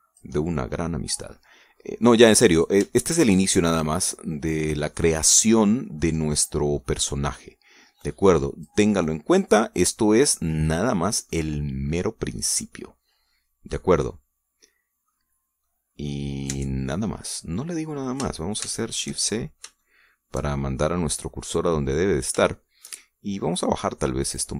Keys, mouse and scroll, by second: 0.0-2.7 drag, 1.3-2.7 middle drag, 1.3-2.7 right drag, 2.8 scroll up 2, 3.5 shift+right click, 4.1 shift+right click, 5.1 click, 5.9-7.0 middle drag, 7.1 scroll up 1, 7.4 middle click, 8.3 right click, 9.0 click, 10.0-10.3 scroll down 1, 10.4-12.5 middle drag, 12.5-13.2 scroll down 2, 13.4-16.3 middle drag, 16.3 scroll down 1, 16.7 middle click, 17.5 Tab, 18.4 scroll down 2, 19.6 shift+c, 20.3 shift+scroll down 2, 20.8 shift+click, 21.1 shift+middle click, 21.8-23.1 middle drag, 23.1-23.5 scroll up 1, 23.5-24.0 shift+middle drag, 24.3 middle click.